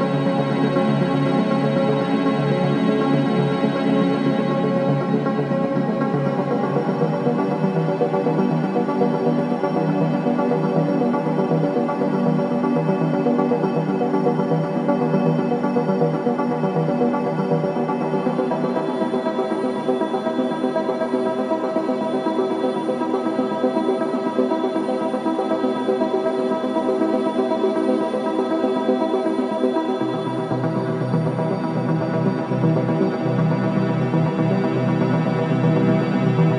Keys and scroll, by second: 0.5 ], 5.3 ], 6.2 ], 6.6 ], 7.8 F9, 10.5 4, 18.2 ctrl+d, 18.3 Escape, 20.9 ctrl+d, 21.1 Escape, 27.0 2, 32.4 Escape.